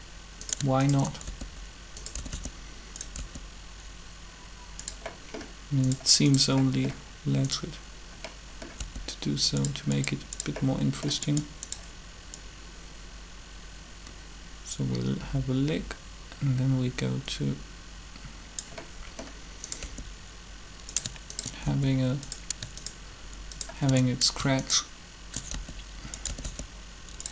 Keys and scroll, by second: 1.2-3.1 typing, 8.8 r, 19.8 r, 21.6 shift+r, 25.5 shift+r, 26.2 r, 26.3 r.